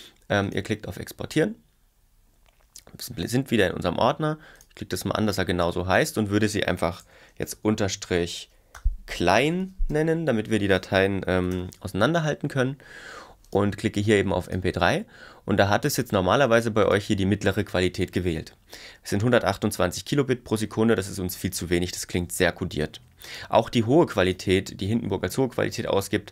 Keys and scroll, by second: 7.0 Left, 7.5 shift+/, 9.4-10.4 typing, 11.4 BackSpace, 11.6 n.